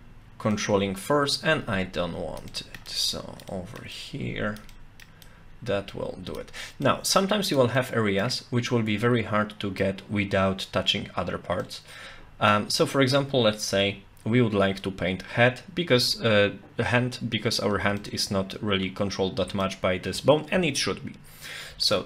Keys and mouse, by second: 2.5 middle click, 2.9 click, 3.5 middle click, 3.9 click, 4.7 middle click, 5.2-6.4 drag, 6.9 click, 7.8 middle click, 8.7-9.8 middle drag, 11.6 middle click, 13.8 Tab, 15.9 Tab, 18.0-19.6 middle drag, 21.8 Tab.